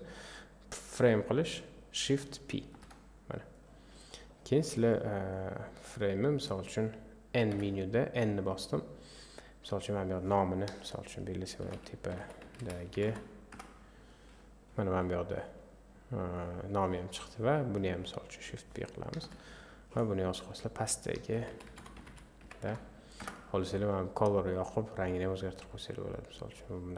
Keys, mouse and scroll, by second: 2.7 shift+p, 4.6-5.9 drag, 7.5 n, 17.9 click, 19.2 shift+p, 23.2-24.6 drag.